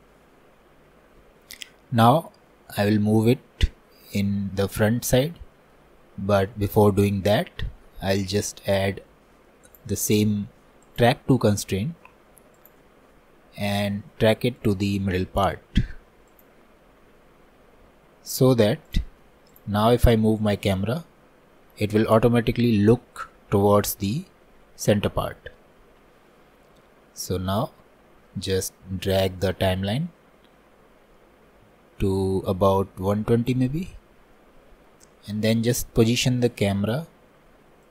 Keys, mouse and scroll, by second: 2.2-2.6 scroll down 1, 2.6-6.1 middle drag, 6.1-6.5 scroll up 1, 6.5-10.9 shift+middle drag, 12.7-18.1 drag, 18.1-18.5 scroll down 2, 18.5-35.1 middle drag, 35.1-36.9 scroll down 1, 36.9-37.9 scroll down 1.